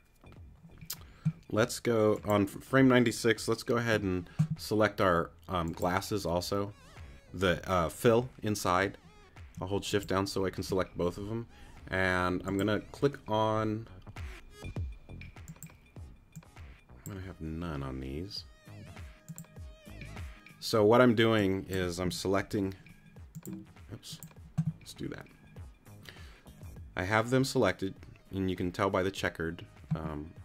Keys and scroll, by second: 3.8 q, 22.4 q.